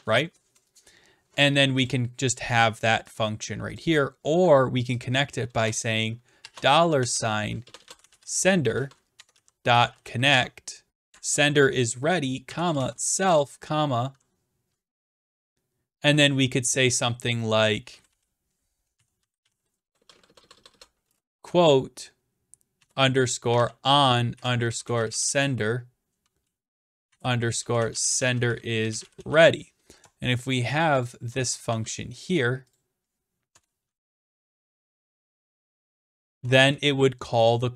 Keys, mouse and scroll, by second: 1.9-2.9 drag, 3.8 click, 5.0 click, 5.6 Return, 6.4-8.7 typing, 10.0-10.9 typing, 10.3 Tab, 11.1 Tab, 12.4-13.6 typing, 17.6-21.2 typing, 23.3-25.7 typing, 26.8-29.8 typing, 31.0 shift+click, 31.7 ctrl+c, 33.1 scroll down 2, 33.5 Return, 33.6-37.0 typing.